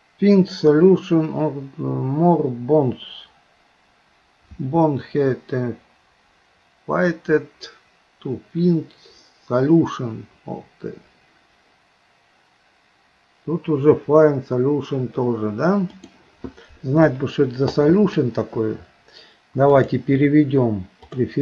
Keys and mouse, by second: 19.9-21.4 drag.